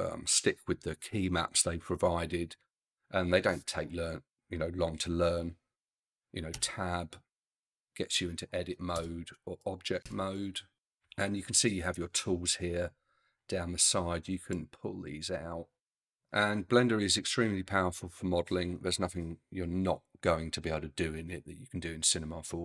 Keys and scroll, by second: 6.6 Tab, 9.0 Tab.